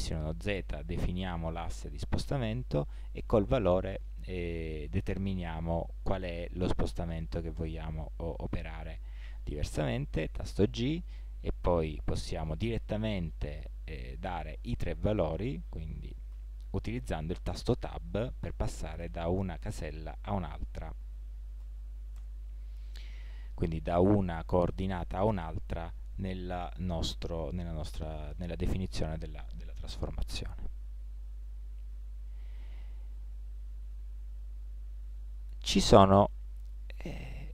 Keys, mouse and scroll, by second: 9.3 ctrl+z, 10.7 g, 32.1 ctrl+z.